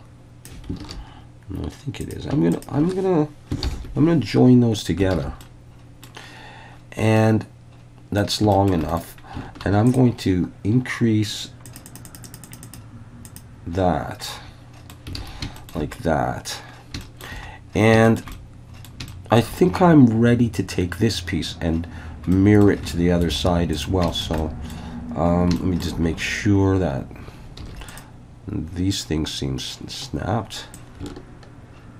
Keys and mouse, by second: 0.8 alt+a, 2.0 click, 2.6 shift+drag, 3.7 ctrl+j, 5.1 alt+a, 5.4 middle click, 7.2-8.2 middle drag, 8.5 shift+middle click, 8.9 middle click, 11.7 click, 11.8 click, 12.2 click, 12.4 click, 13.3 click, 14.3-15.0 middle drag, 15.2 alt+a, 15.6 shift+middle click, 17.0 shift+middle click, 18.1 shift+middle click, 18.3 middle click, 19.1-19.4 shift+middle drag, 22.3 middle drag, 22.9-23.2 shift+middle drag, 23.7 click, 24.1 shift+middle click, 24.4 middle click, 25.6 shift+middle drag, 27.6 alt+a, 27.9 click, 30.8-31.9 ctrl+drag.